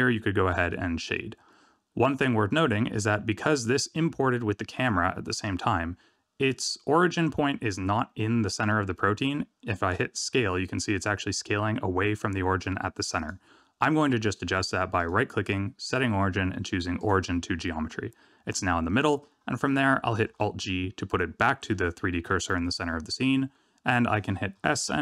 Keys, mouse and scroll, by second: 1.0 middle click, 2.0 middle click, 2.8-5.0 scroll down 2, 10.1 s, 14.9 right click, 20.2 alt+g, 22.2 middle click, 22.8 shift+middle click, 24.5 s.